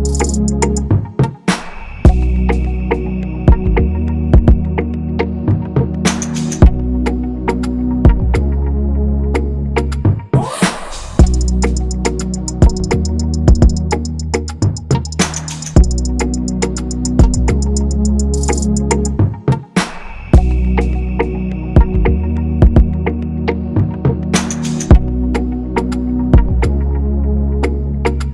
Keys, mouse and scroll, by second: 0.7 alt+Up, 1.0 alt+Up, 1.7 alt+Up, 1.7 alt+Up, 2.0 alt+Down, 4.9 shift+click, 8.3 alt+click, 11.0-11.6 scroll, 16.8 alt+click, 17.5 double click, 17.6 ctrl+a, 18.4 alt+Tab, 21.3 ctrl+c, 21.6 alt+Tab, 22.1-22.9 typing, 24.3-25.0 typing, 24.6-25.0 scroll up 1.